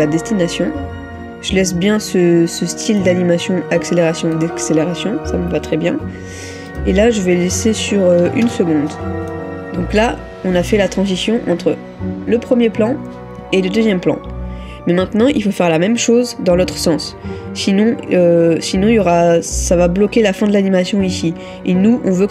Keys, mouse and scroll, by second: 8.5 typing.